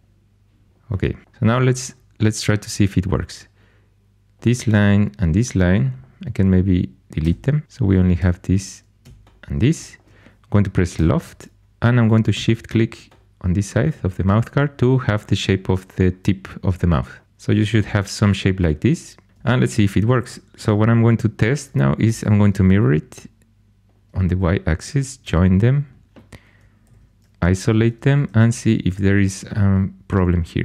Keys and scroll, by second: 1.2 2, 7.2 x, 8.1 2, 10.9 i, 22.0 alt+x, 25.2 j, 26.8 shift+h, 28.2 shift+super+e.